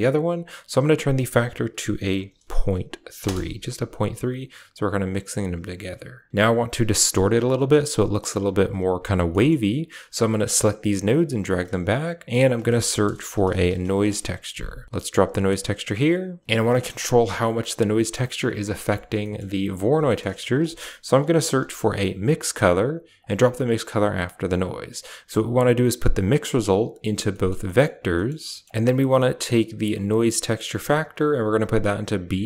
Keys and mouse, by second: 0.5-3.1 drag, 9.2 middle drag, 10.3-10.7 drag, 11.0 g, 12.2 shift+a, 15.8 click, 16.4 g, 16.7 middle drag, 17.1 a, 17.4 click, 17.8 middle drag, 18.6 middle click, 18.8 typing, 19.1 middle click, 19.9 middle click, 20.2 shift+a, 24.2 click, 25.3 click, 26.0-26.9 drag, 27.2 middle click, 27.5 middle click, 28.0 middle drag, 28.4 middle click, 28.7 click, 29.4 drag, 29.8 click, 31.3 click, 31.4-32.4 drag.